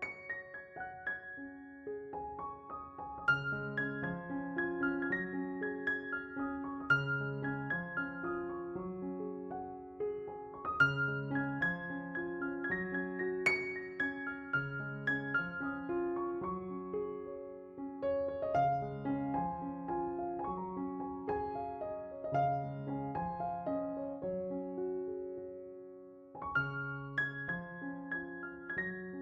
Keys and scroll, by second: 0.5 s, 1.3 s, 6.3 4, 6.7 s, 7.5 4, 14.5 3, 23.1 s.